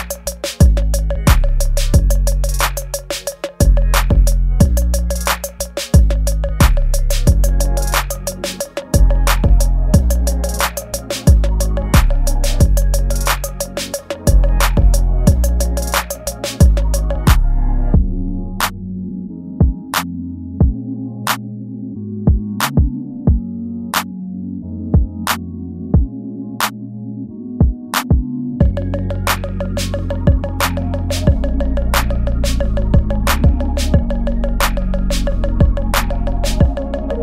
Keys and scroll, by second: 0.0 ctrl+z, 0.3 ctrl+z, 0.8 ctrl+z, 1.6 ctrl+z, 3.9 ctrl+c, 4.4 space, 5.9 ctrl+v, 9.5 space, 10.0 space, 10.4 space, 11.3 ctrl+a, 11.9 ctrl+s, 17.0-20.3 typing, 21.3 ctrl+z, 22.4 space, 22.8 space, 24.1 space, 26.8 space, 27.3 ctrl+z, 30.3-33.4 typing, 31.1 ctrl+z, 32.6 ctrl+z, 35.5 space, 36.5 ctrl+z.